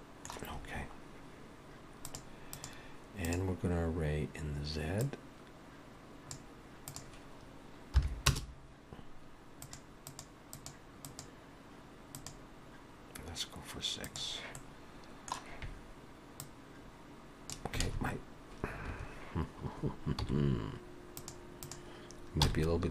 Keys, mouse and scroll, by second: 2.0 click, 2.6 click, 5.1 click, 7.0 click, 9.7 click, 10.6 click, 11.1 click, 12.2 click, 14.1 click, 14.6 middle click, 16.4 click, 22.5 n, 22.8-22.9 scroll down 3.